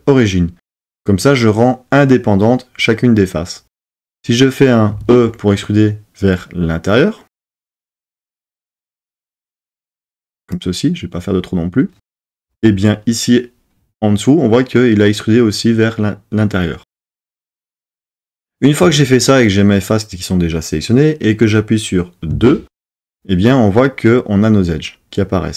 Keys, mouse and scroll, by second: 5.0 e.